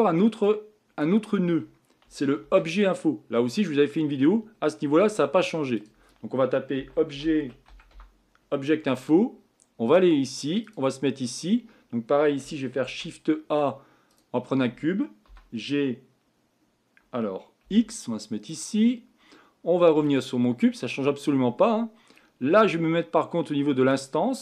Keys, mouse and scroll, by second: 14.2 shift+a, 15.3 g, 20.1 click, 23.9-24.4 drag.